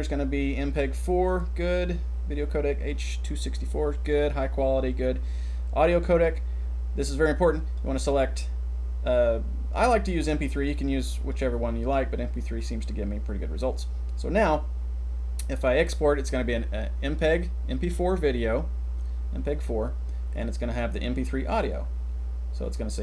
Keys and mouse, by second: 7.5-11.4 drag.